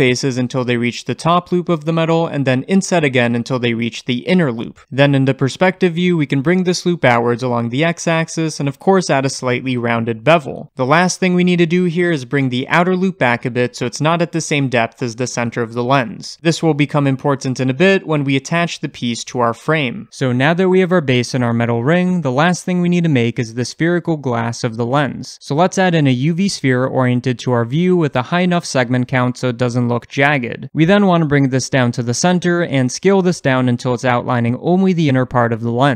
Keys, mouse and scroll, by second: 2.5 i, 5.1 alt+click, 5.3-7.6 middle drag, 6.5 g, 7.6 click, 8.3 ctrl+b, 11.7 alt+click, 12.6 g, 19.9 Tab, 26.5 shift+a, 28.3-30.2 drag, 30.2-32.4 shift+middle drag, 31.0 scroll up 2, 31.1 g, 32.4 click, 33.0 s.